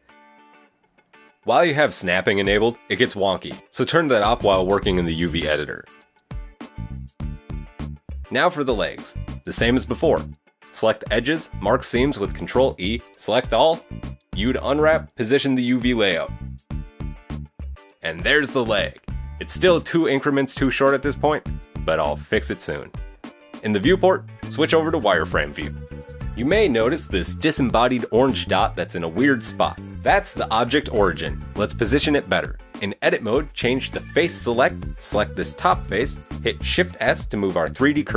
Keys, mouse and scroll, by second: 0.0-1.1 typing, 0.1 shift+middle click, 0.2 shift+middle click, 0.3 scroll down 1, 1.9 right click, 2.4 click, 2.7 right click, 3.1 shift+right click, 3.3 shift+right click, 3.6 right click, 3.8 g, 4.7 click, 4.7 g, 4.9 scroll down 1, 5.1 shift+middle click, 5.1 right click, 5.2 shift+right click, 5.3 shift+right click, 5.6 g, 5.8 right click, 5.9 shift+right click, 6.0 g, 6.1 right click, 6.2 shift+right click, 6.6 right click, 6.9 shift+right click, 7.1 right click, 7.1 scroll down 2, 7.3 g, 7.4 right click, 7.6 shift+right click, 7.6 g, 7.6 right click, 7.8 g, 7.9 right click, 7.9 middle click, 8.3 Tab, 8.4 scroll down 4, 8.4 middle click, 8.5 shift+middle click, 8.6 scroll up 2, 9.7 right click, 9.9 shift+Tab, 9.9 shift+middle click, 10.0 middle click, 10.0 click, 10.3 shift+middle click, 10.3 click, 10.6 right click, 10.7 middle click, 10.7 shift+right click, 10.8 shift+right click, 10.9 shift+right click, 11.4 shift+right click, 11.7 ctrl+e, 12.8 shift+middle click, 12.9 scroll down 2, 13.2 a, 13.9-14.7 scroll down 2, 14.4-15.4 typing, 14.9 shift+middle click, 15.1 click, 15.1 scroll up 3, 15.3 shift+middle click, 15.9-16.4 scroll up 2, 16.0 shift+middle click, 16.5 g, 16.8 shift+right click, 17.2 shift+g, 17.4 right click, 17.6 shift+right click, 17.7 shift+right click, 17.9 g, 17.9 right click, 18.1 shift+right click, 18.1 g, 18.6 middle click, 19.4 Tab, 19.6 middle click, 19.9 scroll down 2, 20.2 shift+middle click, 21.1 scroll down 1, 21.6 Tab, 21.9 KP_1, 22.0 scroll up 1, 22.3 scroll down 2, 22.7 right click, 22.7 middle click, 23.2 right click, 23.5 Tab, 24.7 click, 33.6 click, 34.5 right click, 35.0 middle click, 36.1 shift+s.